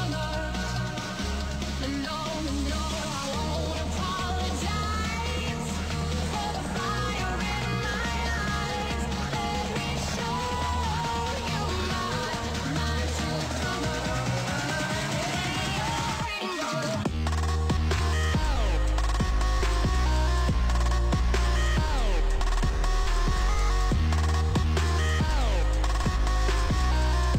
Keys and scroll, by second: 2.3 ctrl+z, 17.3 ctrl+z, 19.7 ctrl+s, 22.6 ctrl+d, 24.8 Delete, 25.6 ctrl+space, 26.2 t, 26.7 n, 26.9 t.